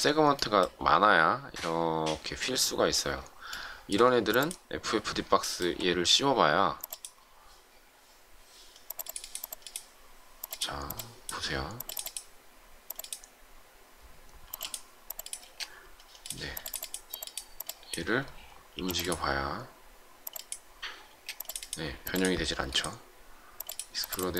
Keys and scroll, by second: 14.5 m, 15.3 space, 18.7 m, 21.0 space.